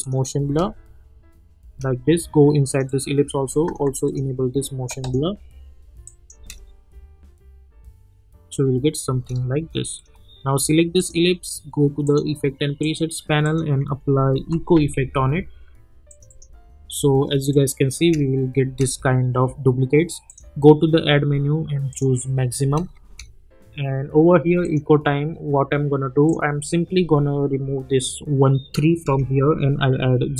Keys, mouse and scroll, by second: 0.4 space, 2.7 click, 3.6 ctrl+a, 4.0 click, 6.3 space, 9.0 space, 9.9 click, 13.7-15.2 typing, 16.1 click, 18.0 space, 20.3 click, 22.6 space, 24.6 click.